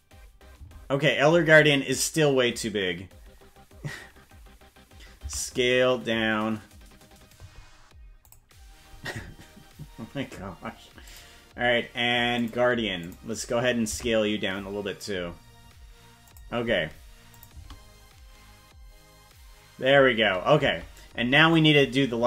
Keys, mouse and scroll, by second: 0.6 space, 5.2 s, 11.1 click, 12.4 click, 13.0 click, 13.8 s, 17.3 click, 17.5 space, 20.7 space, 21.5-22.2 drag.